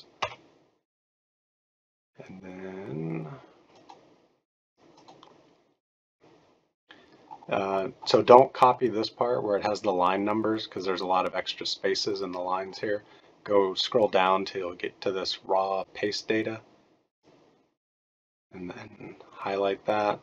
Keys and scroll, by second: 0.3 Return, 4.2 Return, 5.2 Return.